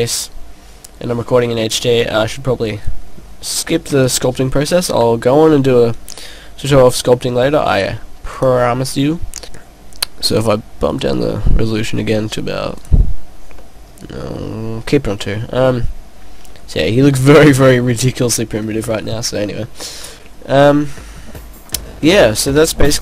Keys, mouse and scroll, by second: 9.5 click, 11.0 click, 12.9 click, 13.6 middle click, 14.8 middle click, 20.8 scroll down 1, 21.0 middle click, 21.6 scroll down 1, 22.6 middle click.